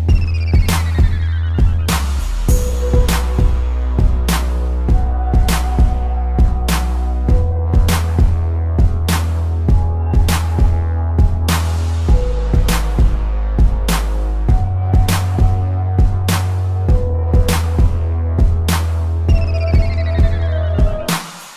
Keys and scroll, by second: 3.9 space, 4.3 ctrl+-, 4.6 p, 6.7 space, 8.3 space, 9.8 ctrl+=, 10.1 space, 11.7 space, 12.5 ctrl+-, 12.6 space, 16.1 space, 18.8 space, 20.3 space, 21.2 space.